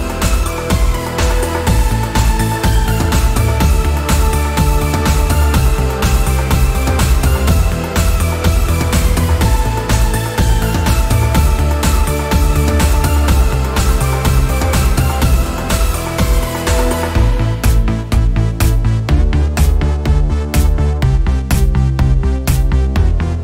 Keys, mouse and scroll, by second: 4.1 right click, 4.6 click, 9.3-9.7 scroll up 1, 9.7-15.5 drag, 16.3 click, 17.6 click, 18.8 click, 21.3 scroll up 1, 21.6-23.4 drag.